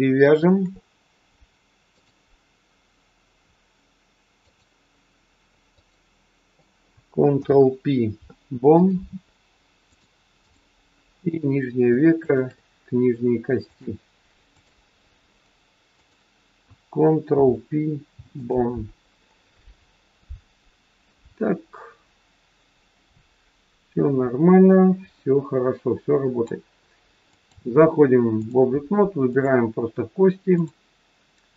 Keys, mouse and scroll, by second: 0.1 shift+click, 1.9 click, 5.6 click, 7.3 ctrl+p, 9.9 click, 11.2 click, 12.2 shift+click, 13.6 click, 15.9 click, 17.2 ctrl+p, 19.0-20.3 scroll down 3, 21.7 click, 27.2 click, 29.2 click, 30.5 click.